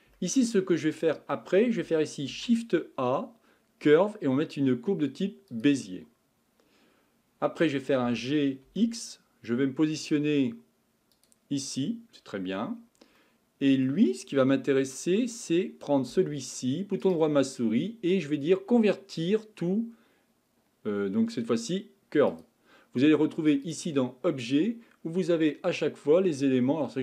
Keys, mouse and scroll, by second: 0.2-2.3 shift+middle drag, 2.3 shift+a, 8.0 g, 13.2-15.3 middle drag, 15.3 click, 17.0-20.2 right drag, 23.6-26.8 drag.